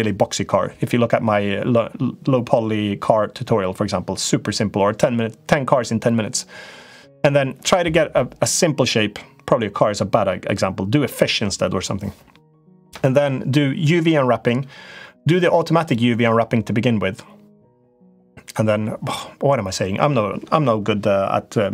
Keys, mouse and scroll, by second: 15.7-18.6 drag.